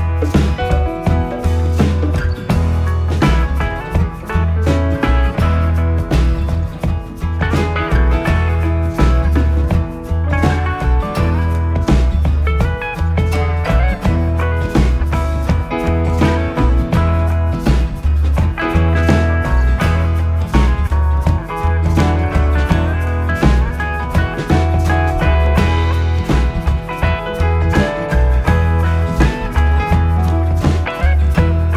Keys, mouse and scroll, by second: 0.5-1.4 scroll up 2, 1.4 shift+middle click, 2.1-2.7 shift+scroll up 3, 2.8-4.0 shift+middle drag, 4.0 KP_7, 6.8 e, 12.3 s, 17.5 e, 24.3 s, 27.3 e, 30.6 r.